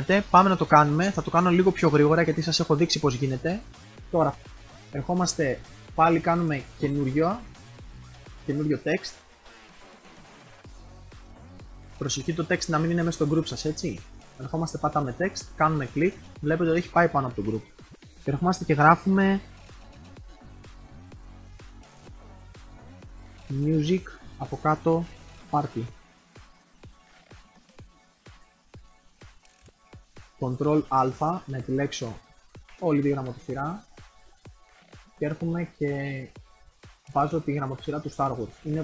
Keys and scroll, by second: 20.1-23.1 typing, 30.5 ctrl+a.